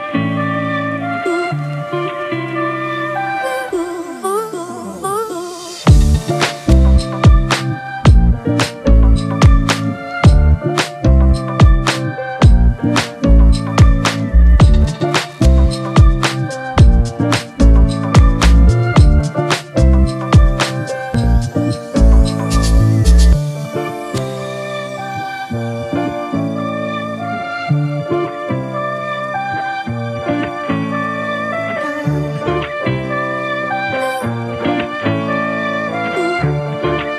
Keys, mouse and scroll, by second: 3.3 Return, 8.8-9.4 typing, 13.5 typing, 14.3 double click, 20.6 ctrl+t, 29.0 Return, 34.7 ctrl+t.